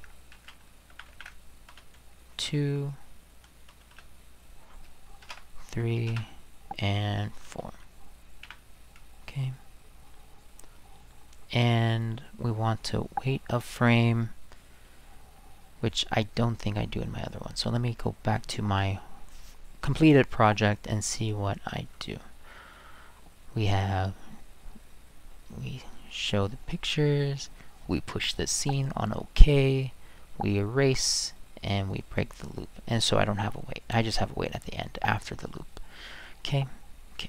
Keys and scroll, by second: 0.3 ctrl+c, 0.6 ctrl+v, 0.9 ctrl+v, 1.7 space, 2.4 2, 3.7 space, 3.9 space, 5.2 BackSpace, 5.3 3, 6.1 Return, 7.5 space, 8.4 4.